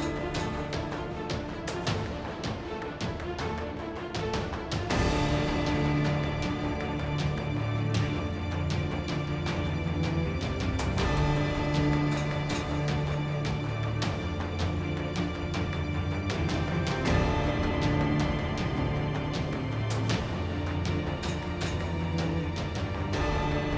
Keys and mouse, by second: 0.0-1.8 typing, 1.9 ctrl+Tab, 2.8 drag, 3.2-4.1 typing, 4.1 ctrl+n, 4.3 Tab, 4.4 Tab, 5.9 KP_1, 6.2 z, 6.5 k, 7.7 z, 8.9-9.3 drag, 9.3-10.9 typing, 9.6 Tab, 10.2 Tab, 10.6 click, 12.2 ctrl+x, 12.3 Tab, 12.4 Tab, 12.9 KP_7, 13.6 g, 14.2 z, 14.5 ctrl+Tab, 14.8 z, 16.3-23.7 typing, 17.4 ctrl+Tab.